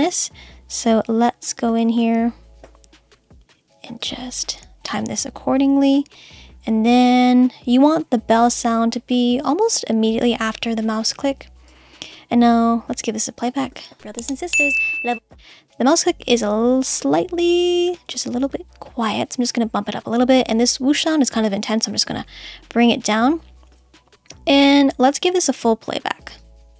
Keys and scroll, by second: 13.7 space.